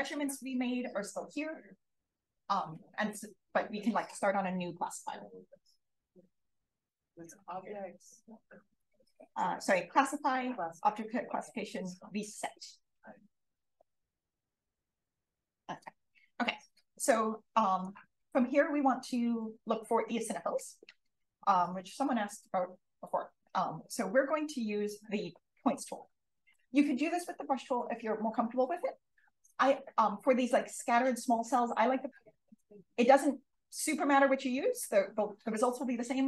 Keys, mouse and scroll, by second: 6.8 click, 14.4 d, 17.6 click.